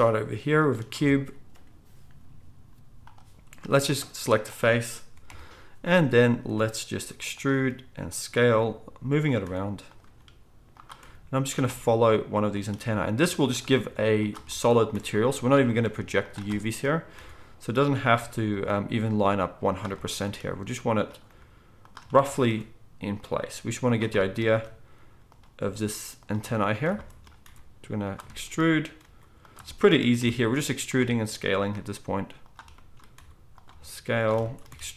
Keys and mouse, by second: 0.9 Tab, 3.9 click, 5.2 KP_1, 7.0-12.7 typing, 13.8 r, 14.9 e, 15.9 s, 17.1 e, 18.1 r, 18.6 g, 20.2 e, 21.3 g, 22.4 e, 23.5 r, 24.5 e, 25.6 g, 26.3 s, 27.4 e, 29.0 r, 30.2 e, 31.0 s, 31.7 g, 33.1-34.9 typing.